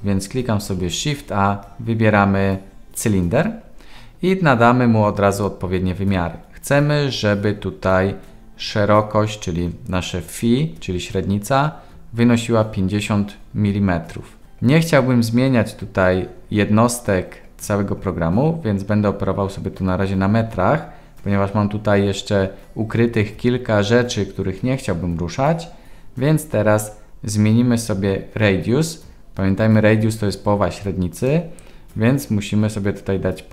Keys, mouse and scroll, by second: 0.6 shift+a, 31.1-33.5 drag.